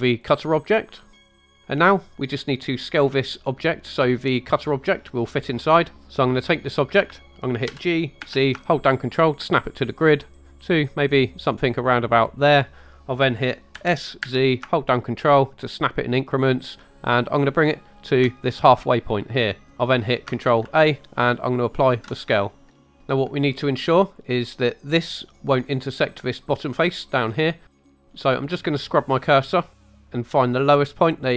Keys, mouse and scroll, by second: 0.2 click, 1.1 click, 7.7 g, 8.2 z, 12.2 ctrl+click, 13.7 s, 14.3 z, 18.1 ctrl+click, 20.6 ctrl+a, 22.7 scroll up 2, 22.8 shift+middle drag, 24.1 click, 28.6 click.